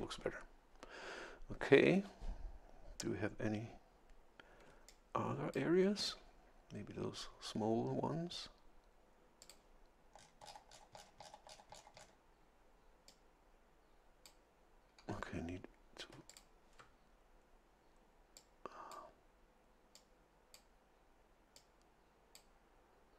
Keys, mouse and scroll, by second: 4.7 a, 4.9 click, 9.4 click, 10.2-10.6 scroll down 2, 10.6-12.2 scroll up 2, 13.1-14.5 drag, 16.3 ctrl+click, 18.3 click, 19.9 click, 21.5-22.5 drag.